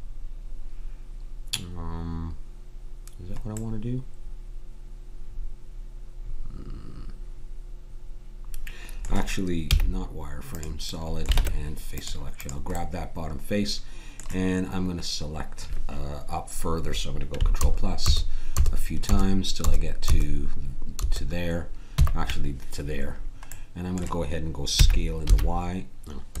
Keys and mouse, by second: 9.6 z, 11.3 ctrl+Tab, 17.6 ctrl+KP_Add, 24.7 s.